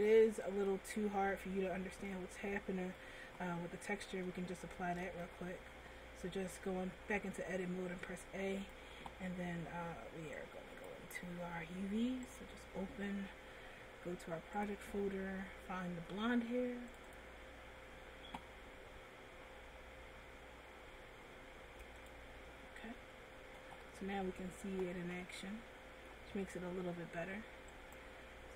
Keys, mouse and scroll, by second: 1.5 ctrl+z, 2.3 middle click, 4.0 Tab, 4.8 Tab, 5.3 a, 6.6 a, 8.2 click, 10.5 click, 12.6 click, 22.2 click, 23.4 Tab, 24.1 middle click, 25.1 scroll down 1, 25.4 middle click, 27.0 Tab, 28.0 right click.